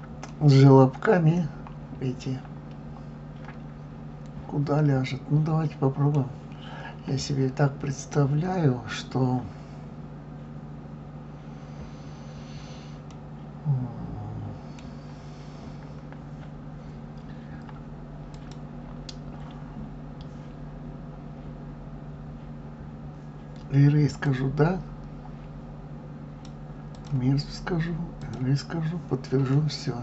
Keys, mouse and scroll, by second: 0.3-3.3 middle drag, 13.1-16.1 middle drag, 18.4 click, 24.2-29.5 drag, 29.5-30.0 middle drag.